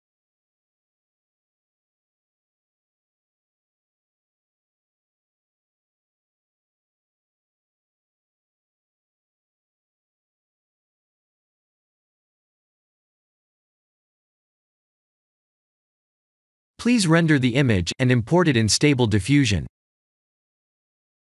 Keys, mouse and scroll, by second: 0.0-1.6 typing, 3.3 shift+d, 4.2 shift+d, 4.8 shift+d, 7.9 shift+d, 10.2 s, 12.8 s, 14.2 click, 15.3 click, 16.1 s, 18.2 click, 20.0 F12.